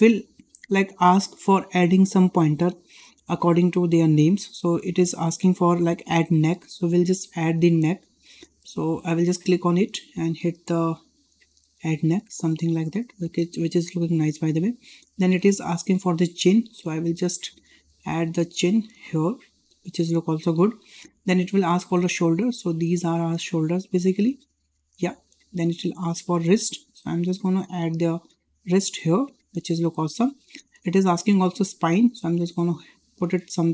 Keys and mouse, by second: 9.3-11.8 drag, 14.2-14.6 shift+middle drag, 16.7 shift+middle drag, 17.5-19.6 drag, 21.0-21.3 shift+middle drag, 22.2-24.9 drag, 26.3 shift+middle drag, 27.3-29.6 drag, 31.0-33.7 drag.